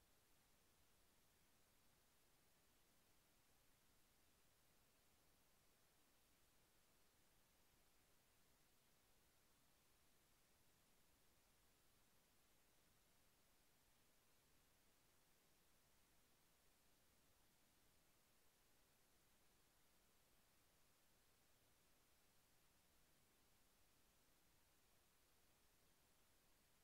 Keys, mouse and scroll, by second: 4.9 click, 5.4 click, 6.7-7.2 scroll up 1, 9.0 click, 10.6 scroll down 1, 10.9 scroll up 1, 12.2 scroll down 1, 15.1 click, 16.4 click, 18.4 click, 20.9 click, 25.7-26.8 drag.